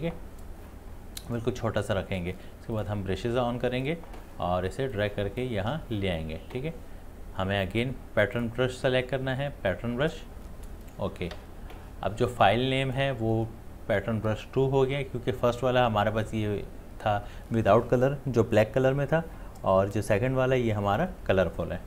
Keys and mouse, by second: 2.7-21.8 drag.